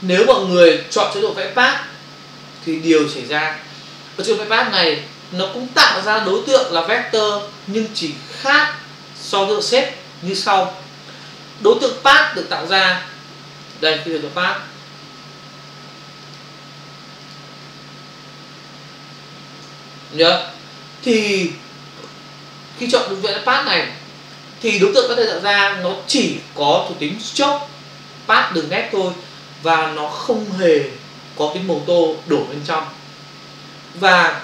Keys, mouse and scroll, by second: 2.0 click, 13.7 click, 16.2 click, 16.3 click, 17.2 click, 17.3 click.